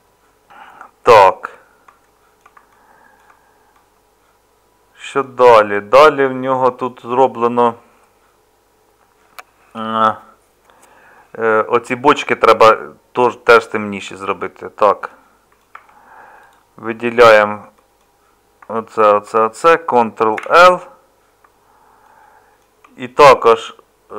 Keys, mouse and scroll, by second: 15.7 Tab, 20.4 ctrl+l.